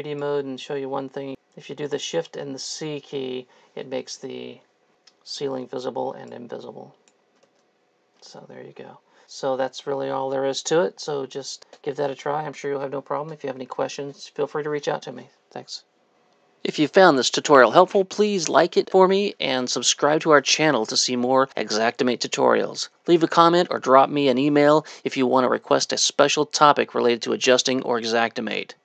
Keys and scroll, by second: 5.5 shift+c, 7.5 shift+c, 8.3 shift+c.